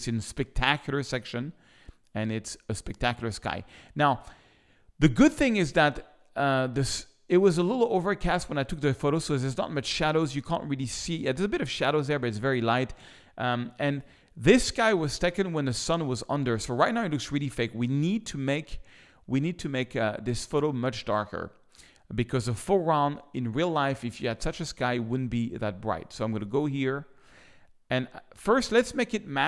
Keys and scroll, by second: 13.6 z.